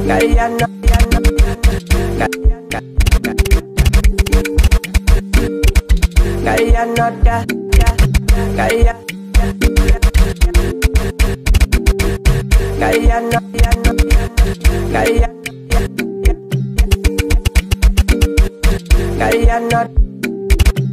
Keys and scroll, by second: 0.0-20.9 typing.